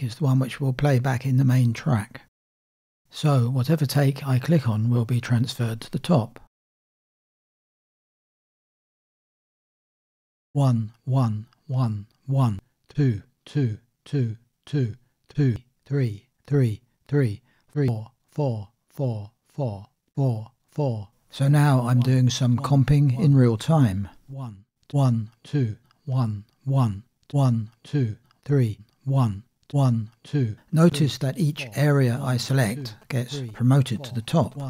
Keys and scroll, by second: 10.6 space.